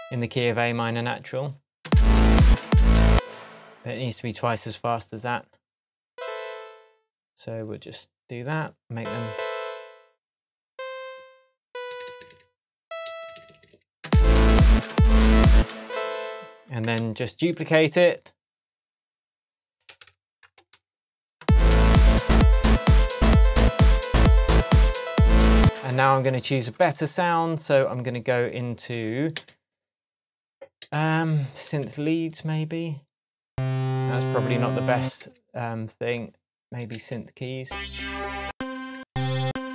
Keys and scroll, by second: 1.8 space, 10.9 Left, 17.0 super+d, 18.6 super+d, 19.9 super+d, 20.6 shift+super+d, 20.7 shift+super+Tab, 21.4 shift+space, 25.6 space, 26.8 Right, 29.3 Right, 30.8 Left, 35.2 Left, 36.6 Up, 38.9 Down.